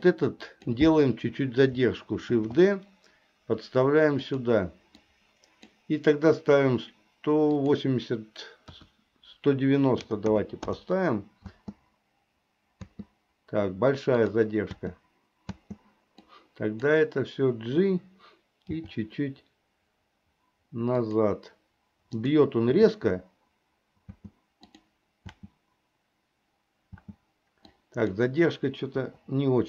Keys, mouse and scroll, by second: 0.1 click, 0.3 click, 2.4 shift+d, 5.1 click, 7.8-10.8 drag, 11.6 space, 12.9 space, 14.3 click, 15.6 space, 16.3 click, 18.8 g, 22.3 click, 22.8 space, 24.3 space, 24.8 click, 27.0 space, 27.8 click, 29.1 Delete.